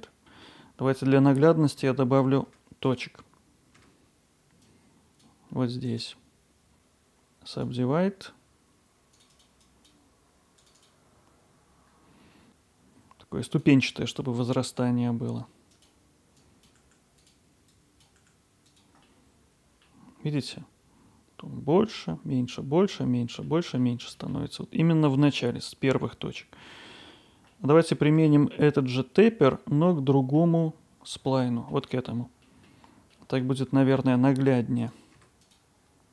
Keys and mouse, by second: 1.8 Tab, 2.5 Tab, 2.9-3.8 drag, 3.8 Tab, 4.6-5.9 drag, 6.0-7.6 right drag, 9.0-11.0 drag, 11.0 g, 12.0 click, 13.5-14.7 drag, 14.7 g, 16.6 click, 16.8 g, 17.2-18.2 drag, 18.2 g, 18.7 click, 19.2-19.8 middle drag, 23.5 middle click, 27.6-27.9 middle drag, 28.2 Tab, 29.3-30.4 middle drag, 31.3-31.7 alt+middle drag, 32.4 middle drag, 33.2 middle click, 34.4 Tab, 34.8 click, 35.2 Tab, 35.4-36.1 drag.